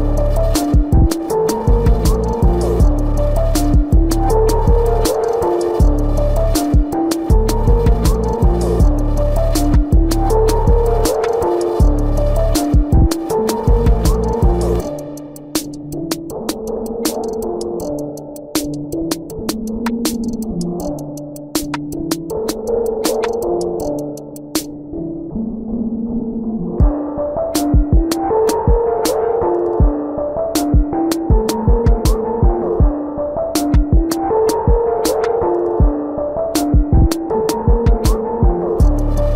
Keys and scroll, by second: 5.6 space, 12.2 space, 14.4 space, 23.1 ctrl+-, 28.3 ], 28.7 space, 30.1 ].